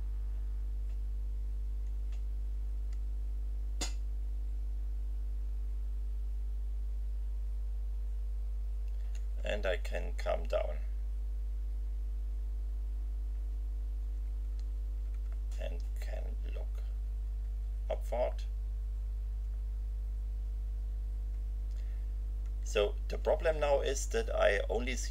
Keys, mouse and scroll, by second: 2.6 End, 9.8 Page_Down, 15.3 Down, 18.0 Left, 20.4 Down, 22.5 Right.